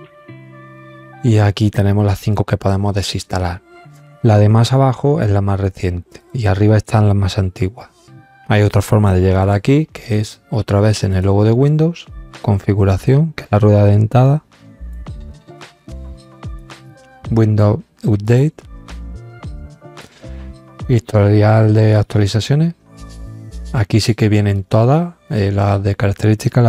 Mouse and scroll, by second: 11.1 click, 14.2 click, 18.2 click, 21.8 click, 23.9 click, 25.2 click.